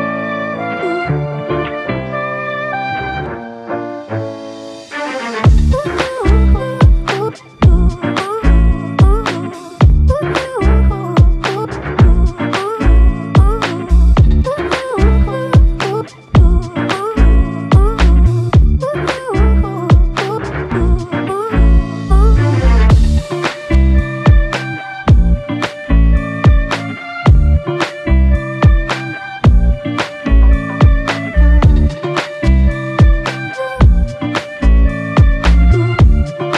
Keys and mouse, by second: 0.4 f, 5.2 g, 8.0 shift+click, 17.7 alt+click, 20.2 f, 22.4 double click, 28.0 f, 29.0 alt+click, 33.2 double click, 35.6 shift+click, 35.9 shift+double click, 36.3 shift+click.